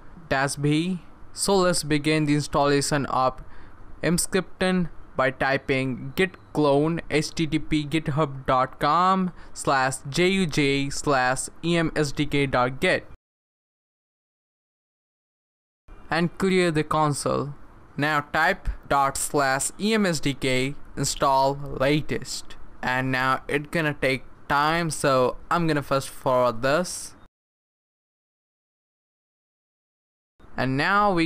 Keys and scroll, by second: 2.6-13.4 typing, 16.6-21.6 typing, 22.4 Return, 30.2 typing.